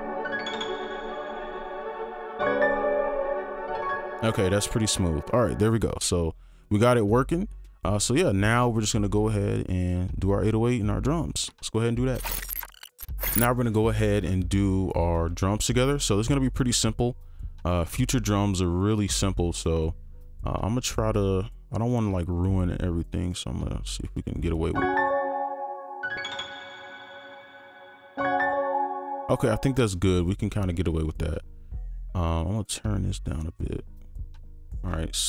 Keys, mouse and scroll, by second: 3.9 space, 5.7 double click, 7.2-7.5 scroll down 1, 9.1-11.1 scroll down 1, 23.3 double click, 24.8 space, 29.0 space, 29.8 double click.